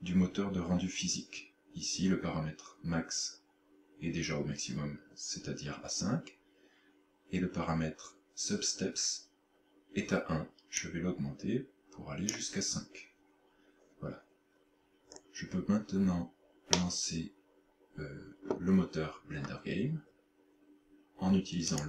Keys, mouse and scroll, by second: 10.8 click, 15.1-15.4 scroll down 4, 16.8 middle click, 21.7 click.